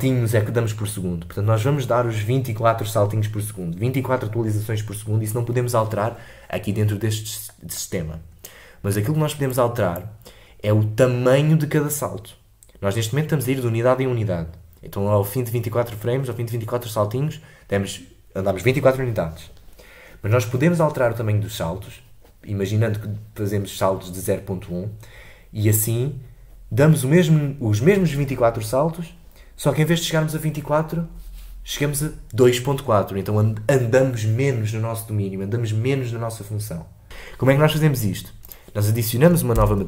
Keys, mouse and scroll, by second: 39.6 a.